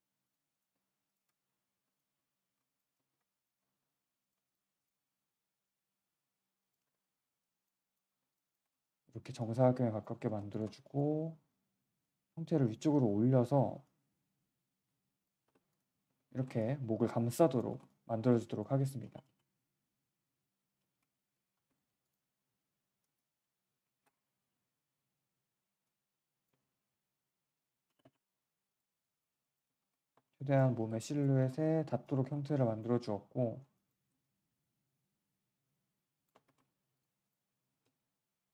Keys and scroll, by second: 0.0 q, 1.7 Delete, 2.3 3, 3.6 1, 5.0 w, 6.8 r, 8.1 q, 8.6 3, 13.4 g, 15.4 Delete, 16.0 3, 20.7 f, 22.4 1, 24.8 shift+w, 25.3 4, 26.4 3, 27.8 space, 28.0 space, 30.1 alt+1, 30.7 3, 31.3 q, 32.3 1, 33.9 3, 36.4 1, 37.5 w.